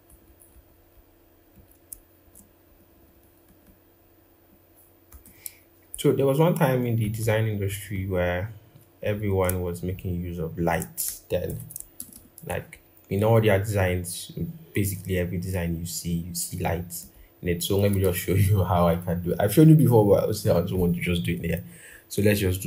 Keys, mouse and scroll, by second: 0.0 Down, 0.3 Down, 1.9 shift+Down, 2.4 Up, 2.6 Up, 2.8 Up, 3.2 Right, 3.3 Right, 4.8 Left, 6.8 Left, 6.9 Left, 7.4 Left, 9.5 shift+click, 10.3 shift+click, 11.7 ctrl+-, 11.9 ctrl+-, 17.3 scroll up 1, 17.8 ctrl+-, 18.4-18.8 scroll, 21.2-21.7 scroll up 1, 21.7-22.6 scroll.